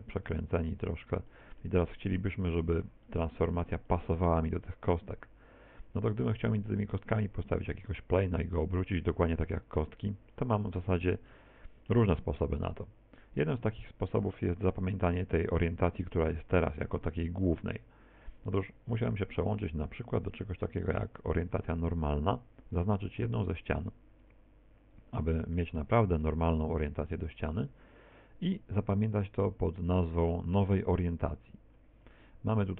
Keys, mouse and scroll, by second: 0.4 click, 1.3 middle click, 4.0 middle click, 10.4 middle click, 17.1 right click, 19.6 click, 22.0 Tab, 22.8 right click, 23.2 shift+right click, 24.3 right click, 25.0 shift+right click, 25.6 middle click, 26.6 middle click, 31.8-32.2 scroll up 2.